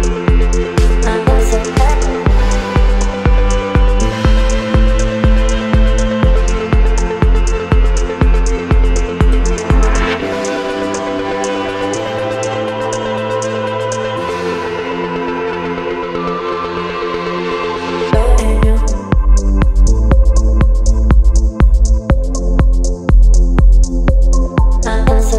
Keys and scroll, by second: 6.5 KP_8, 7.4 Return, 8.5 ctrl+t.